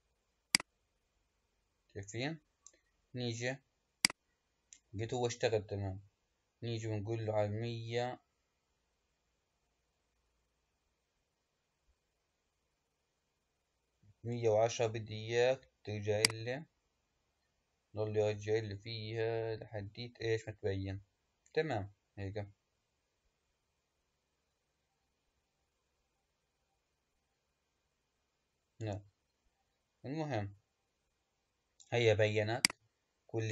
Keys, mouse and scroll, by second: 0.4-3.5 drag, 3.9-7.0 drag, 16.0-19.2 drag, 32.4 click.